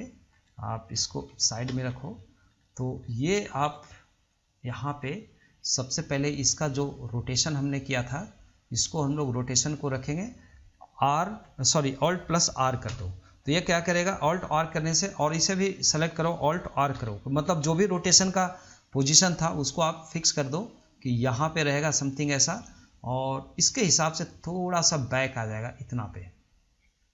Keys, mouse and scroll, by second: 0.0 scroll up 3, 0.0-1.5 middle drag, 1.5 KP_3, 2.1-2.4 scroll up 2, 2.4-4.5 shift+middle drag, 4.6-6.6 shift+middle drag, 7.7 click, 13.1 alt+r, 15.8 click, 17.2 alt+r, 19.3 click, 20.3 click, 24.6 click.